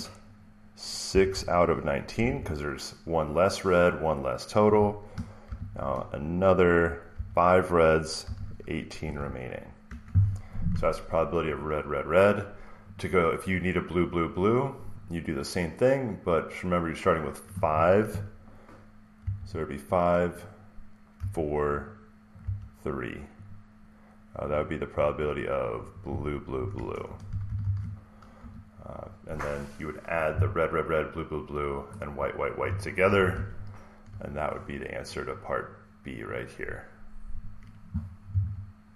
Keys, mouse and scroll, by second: 0.7-2.6 typing, 5.3 typing, 6.8-9.5 typing, 9.8 Return, 11.5 click, 12.0 click, 12.8 click, 13.6 click, 15.0 click, 19.1 typing, 20.3 click, 20.5-21.1 typing, 22.3 click, 22.4 3, 23.4 click, 24.4 click, 24.6 click, 26.0 click, 27.2-28.3 typing, 33.2 alt+Tab, 36.2 click, 37.3 click.